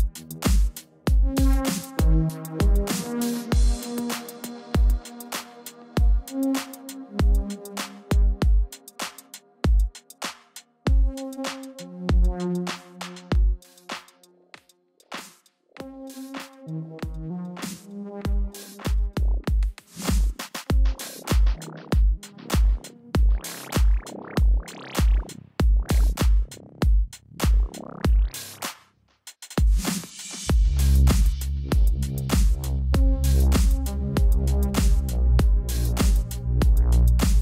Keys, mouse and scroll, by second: 5.1 ctrl+=, 5.3-5.6 typing, 6.6 ctrl+=, 6.8-7.6 typing, 6.9 click, 11.3-14.5 typing, 18.1 click, 18.5 click, 18.6 space, 21.6 space, 21.7 click, 21.8 space, 22.8 space, 22.9 click, 22.9 space, 24.3 space, 24.4 click, 24.5 space, 25.0 ctrl+-, 26.0 click, 28.7 click, 31.7 alt+click, 32.1 click, 34.5 alt+click.